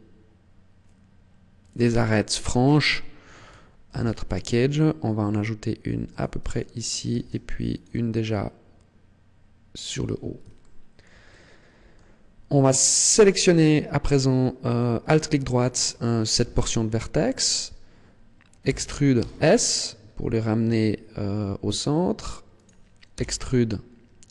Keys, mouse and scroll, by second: 1.6 click, 2.1 shift+middle click, 3.8 ctrl+r, 6.1 click, 7.0 ctrl+r, 9.9 click, 10.5 shift+middle click, 11.2 middle click, 13.2 alt+right click, 16.3 KP_1, 18.6 e, 22.6 click, 23.1 e.